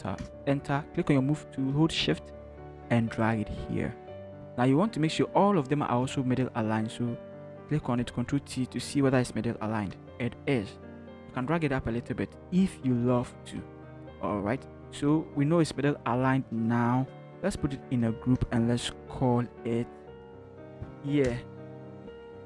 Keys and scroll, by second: 0.3 Return, 0.7 v, 6.3 ctrl+shift+t, 10.0 Return, 11.5 shift+Up, 11.7 shift+Up, 13.6 ctrl+-, 18.0 ctrl+g, 20.1-21.3 typing.